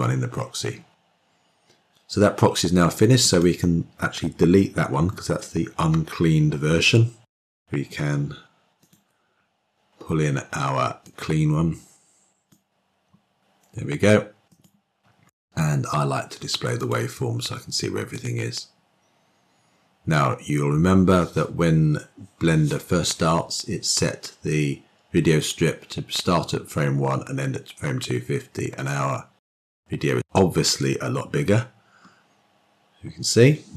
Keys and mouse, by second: 1.5 click, 15.0 click.